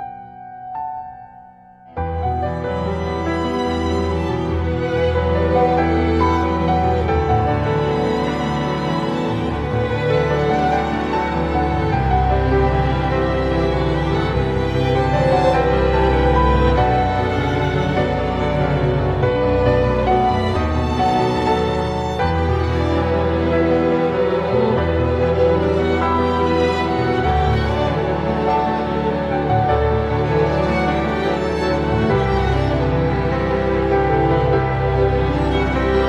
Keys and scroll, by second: 0.5 ctrl+z, 4.0 ctrl+z, 4.6 ctrl+z, 5.7 ctrl+z, 6.2 ctrl+z, 6.4 ctrl+z, 7.0 ctrl+z, 7.6 ctrl+z, 7.9 ctrl+z, 8.3 ctrl+t, 8.5 ctrl+d, 8.7 ctrl+e, 9.0 ctrl+d, 9.2 ctrl+d, 11.1 ctrl+z, 12.2 ctrl+e, 14.4 ctrl+e, 15.8 ctrl+z, 16.0 ctrl+z, 16.8 ctrl+z, 17.7 ctrl+z, 20.3 ctrl+shift+z, 21.1 ctrl+z, 21.4 ctrl+z, 21.9 ctrl+z, 24.1 ctrl+z, 24.4 ctrl+z, 25.8 ctrl+t, 29.9 ctrl+z, 31.4 ctrl+z, 32.6 ctrl+z, 34.9 ctrl+z, 35.2 ctrl+z.